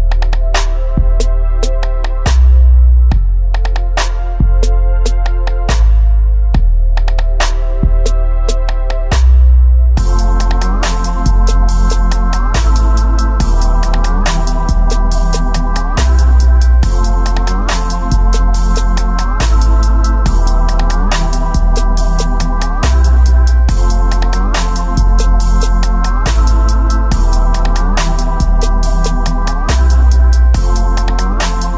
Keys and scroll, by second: 1.2 space, 1.9 space, 2.3 space, 5.7-8.1 typing, 9.8-14.2 typing, 16.0 space, 17.2 space, 17.9 space, 18.7 space, 20.0 space, 20.8 space, 22.2 space, 22.7 space, 23.1 space, 25.1 space, 26.2 space, 27.0 space, 27.8 space, 30.8 space.